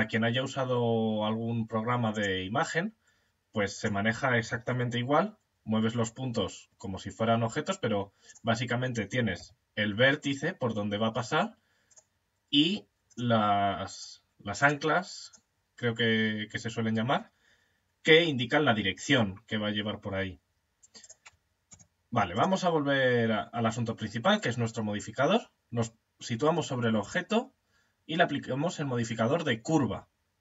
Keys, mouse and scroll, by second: 1.6-5.0 right drag, 4.2 g, 5.0-6.2 drag, 7.7 right click, 8.8 g, 11.3-16.5 right drag, 20.4-23.5 right drag, 21.1 Tab, 26.4 click.